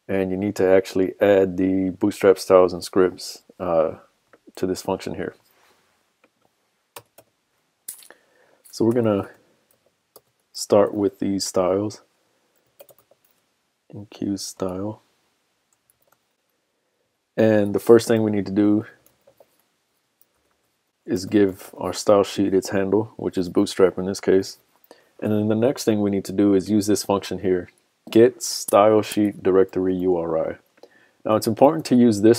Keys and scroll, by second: 29.7 super+c, 31.7 super+v.